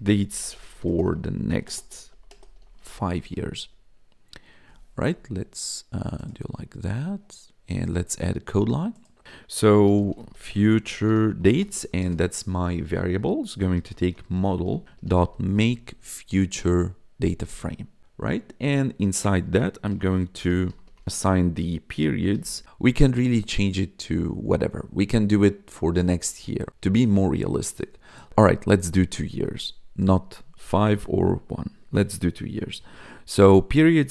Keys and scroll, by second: 0.0-3.6 typing, 9.6-12.3 typing, 13.4-15.8 typing, 16.4 Down, 17.3 Tab, 19.8-22.3 typing.